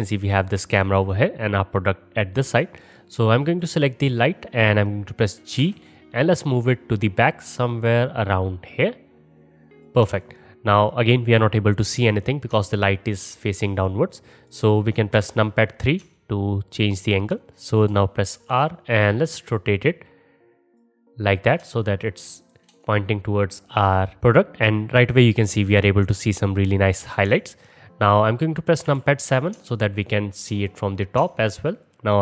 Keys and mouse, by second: 2.8 click, 2.9 middle click, 3.5 click, 3.6-10.1 middle drag, 5.6 g, 10.1-11.2 alt+drag, 11.2-12.6 middle drag, 12.6 alt+click, 12.6 middle click, 12.7-13.7 alt+drag, 15.2 KP_3, 16.6-18.4 alt+shift+drag, 18.4-21.6 middle drag, 18.4 r, 23.1-32.2 middle drag, 28.9 KP_7.